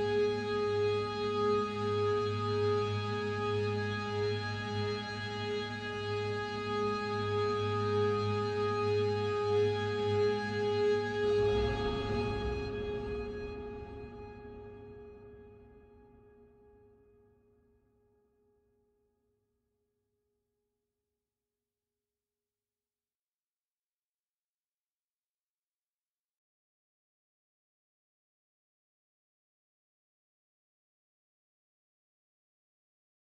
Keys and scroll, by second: 21.0 ctrl+g, 22.0 ctrl+alt+shift+e.